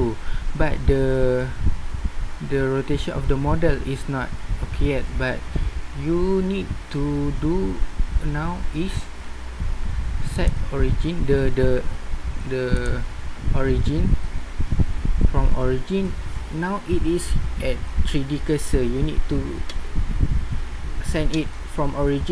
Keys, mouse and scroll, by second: 10.3-12.2 middle drag, 12.8-14.6 middle drag.